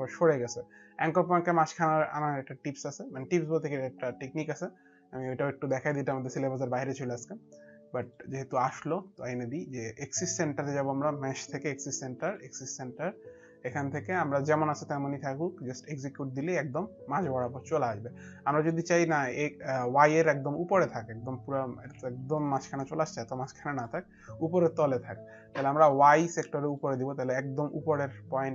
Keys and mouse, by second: 7.9 click, 16.1 click, 22.1 alt+click.